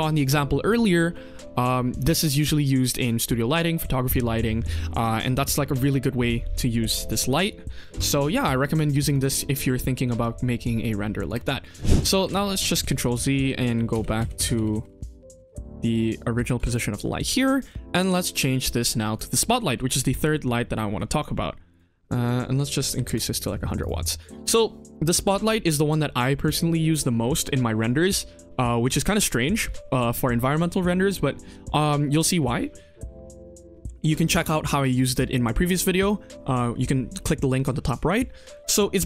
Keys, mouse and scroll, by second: 8.2 click, 9.0 click, 11.2 click, 12.0 click, 12.0 ctrl+z, 12.3 ctrl+z, 12.4 ctrl+z, 12.5 ctrl+z, 12.7 ctrl+z, 12.8 ctrl+z, 13.0 ctrl+z, 13.3 ctrl+z, 13.6 ctrl+z, 13.9 ctrl+z, 14.1 ctrl+z, 14.3 ctrl+z, 14.5 ctrl+z, 14.7 ctrl+z, 14.8 ctrl+z, 15.0 ctrl+z, 15.2 ctrl+z, 15.4 ctrl+z, 15.6 ctrl+z, 15.7 ctrl+z, 16.3 ctrl+shift+z, 16.6 click, 17.2 click, 17.5 click, 17.9 middle drag, 19.0 click, 19.9 g, 22.1 click, 22.9 KP_0, 23.7 click.